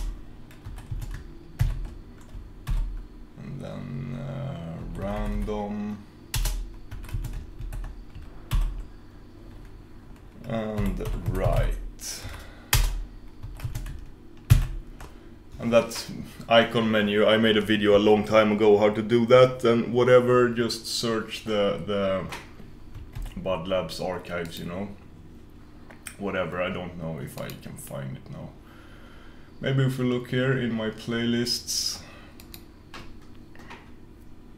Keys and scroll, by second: 23.3 super+f.